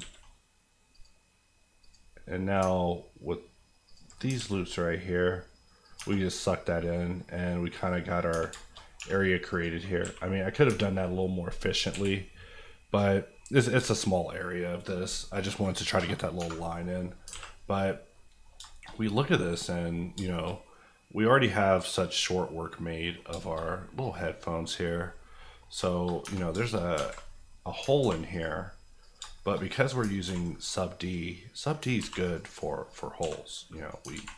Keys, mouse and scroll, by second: 0.9 click, 2.6 ctrl+click, 4.2 click, 4.3 alt+s, 5.8 click, 5.9 Tab, 6.2 scroll down 1, 6.8 middle click, 7.8 scroll up 1, 8.3 Tab, 8.5 shift+middle click, 8.8 scroll up 1, 8.9 1, 9.5 click, 10.0 g, 10.5 click, 10.6 Tab, 10.8 scroll down 1, 11.9 KP_1, 12.6 middle click, 13.1-14.1 scroll down 4, 13.3 middle click, 13.9 shift+middle click, 14.1 middle click, 16.9-18.1 scroll down 4, 17.3 alt+a, 18.1 scroll up 1, 18.1 middle click, 18.6-19.0 shift+scroll down 2, 19.0 middle click, 20.1 shift+middle click, 20.9 middle click, 23.3 shift+middle click, 23.6 shift+scroll up 2, 24.0 click, 25.0 KP_Decimal, 25.4 middle click, 25.7-27.8 scroll up 7, 26.0 shift+middle click, 26.2 Tab, 26.5 shift+middle click, 26.9 alt+z, 27.8 ctrl+scroll up 1, 28.0 ctrl+r, 28.3 click, 29.1 shift+click, 29.3 shift+middle click, 29.6 middle click, 30.0 ctrl+middle click, 30.2 ctrl+r, 31.0 click, 31.9 ctrl+click, 32.0 ctrl+r, 32.2 click, 32.4 right click, 32.8 click, 33.2 x, 33.7 click, 34.0 alt+click, 34.3 z.